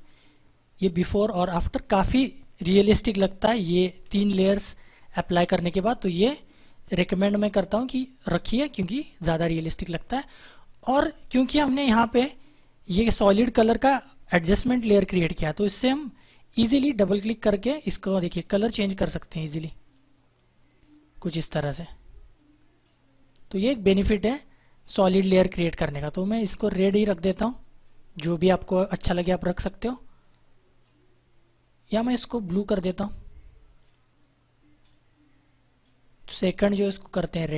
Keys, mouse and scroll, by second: 0.2 click, 6.4 click, 10.0 click, 15.1 click, 31.9 click.